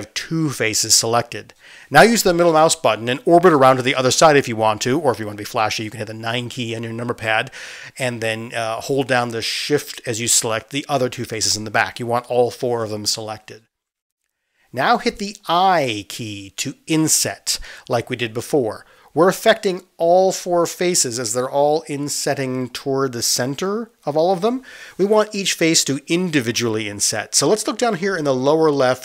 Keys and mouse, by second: 2.9-28.6 middle drag, 16.6 ctrl+z, 16.6 i, 17.7 i, 28.6 click.